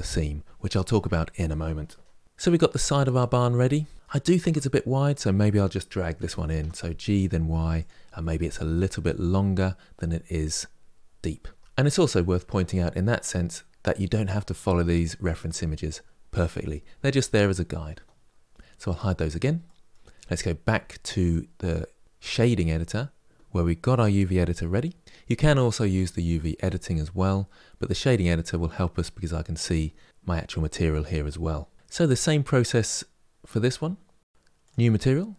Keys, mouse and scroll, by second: 2.2-4.1 middle drag, 4.1 Tab, 4.9 click, 5.9 g, 8.4-11.6 middle drag, 11.6 Tab, 13.2 click, 13.6-18.6 middle drag, 18.6 click, 19.4-22.1 middle drag, 22.1 click, 25.9-27.9 drag, 34.4 click.